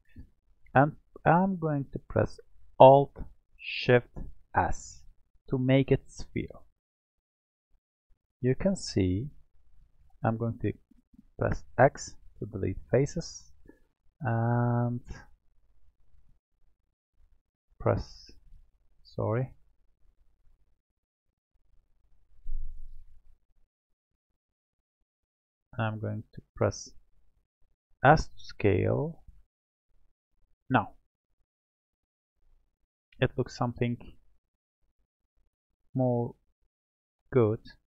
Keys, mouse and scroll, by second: 4.5-6.9 alt+shift+s, 7.7-10.8 middle drag, 11.1 x, 12.9-15.5 middle drag, 15.5 click, 18.1 click, 18.9-19.6 scroll up 2, 20.4 w, 20.6 w, 21.2 w, 22.6 click, 23.9 alt+click, 25.0-25.3 scroll down 1, 25.3-28.0 middle drag, 28.0 s, 30.8-33.8 middle drag, 36.1-36.8 scroll down 1, 36.8-37.9 middle drag.